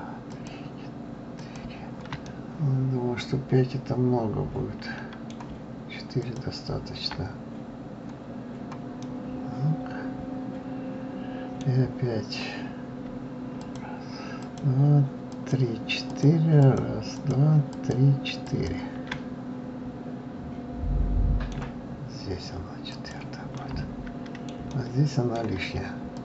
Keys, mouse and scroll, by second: 0.3 shift+click, 1.4 shift+click, 2.3-5.2 middle drag, 6.2 ctrl+click, 8.9-12.0 middle drag, 13.6 shift+click, 14.4 shift+click, 15.2 shift+click, 16.1 shift+click, 16.6 shift+click, 17.1 shift+click, 17.7 shift+click, 18.4 shift+click, 19.1-22.1 middle drag, 22.9 shift+click, 23.6-26.1 shift+middle drag, 26.1 ctrl+click.